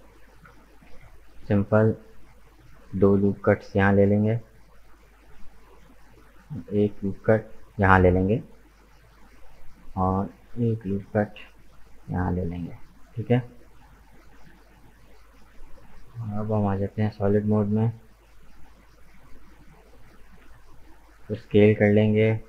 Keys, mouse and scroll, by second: 0.9 ctrl+r, 5.8 ctrl+r, 7.9 right click, 8.4-10.9 middle drag, 10.9 ctrl+r, 12.6 right click, 12.9-15.9 middle drag, 16.4 click, 17.0-19.4 middle drag, 19.4 Tab, 20.4 s.